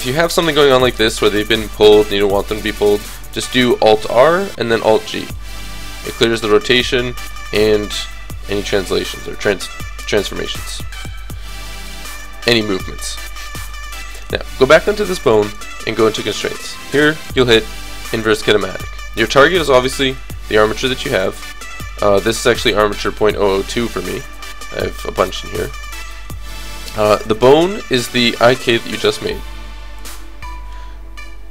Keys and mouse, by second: 4.0 alt+r, 4.6 alt+g, 7.3 KP_3, 8.6 middle click, 13.7-17.3 drag, 15.5 right click, 18.0 click, 19.8 click, 27.5-29.3 drag.